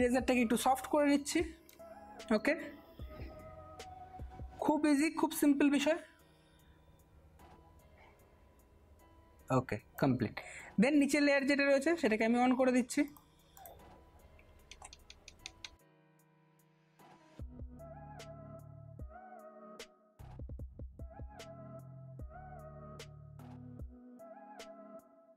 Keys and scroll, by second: 15.0 ], 15.3 ], 15.5 ], 15.7 ], 17.3 space, 17.9 ], 20.0 ctrl+alt+z, 20.2 ctrl+alt+z, 22.2-24.6 typing.